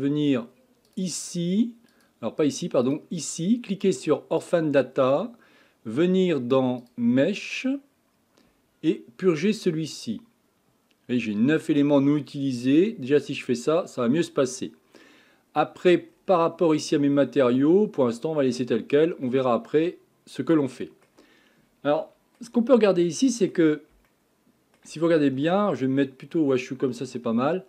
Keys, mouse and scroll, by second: 0.9 click, 2.9-6.0 drag, 6.8 click, 9.9-12.9 drag, 16.1-16.6 scroll down 4, 16.6-17.2 scroll up 5, 17.2-18.7 scroll down 3, 18.7-19.3 scroll down 1, 19.3-22.7 middle drag, 22.7-23.1 scroll up 4, 23.1-27.0 middle drag, 27.0-27.4 scroll down 1, 27.4-27.6 shift+middle drag.